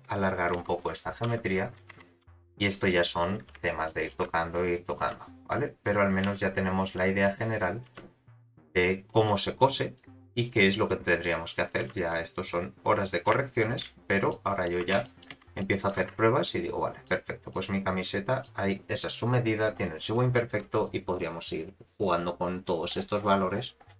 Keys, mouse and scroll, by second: 0.1 click, 0.5 z, 1.2 1, 1.9 Tab, 2.2 1, 2.4 click, 3.4 g, 4.5 click, 5.0 g, 5.8 click, 6.2 g, 7.2 click, 7.8 g, 8.6 click, 9.3 g, 9.9 click, 10.5 g, 11.2 click, 11.8 g, 12.5 click, 13.2 g, 13.9-14.7 scroll down 5, 14.2 middle click, 14.8 Tab, 15.0 middle click, 15.3 z, 15.6-15.9 middle drag, 16.0 space, 16.7 middle click, 17.7-18.7 middle drag, 20.1-20.6 scroll up 4, 20.8 space, 22.6-23.9 scroll down 39.